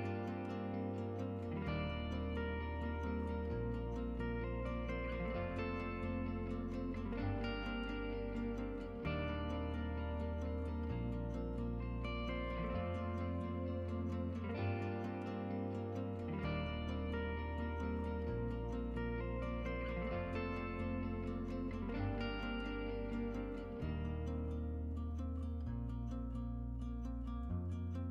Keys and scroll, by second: 12.3 Tab, 13.1 Tab.